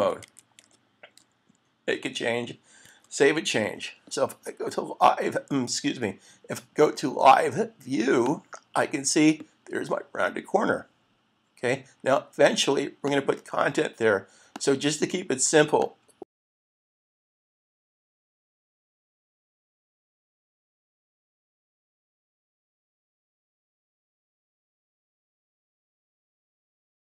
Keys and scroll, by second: 0.2 ctrl+`, 2.9 super+s.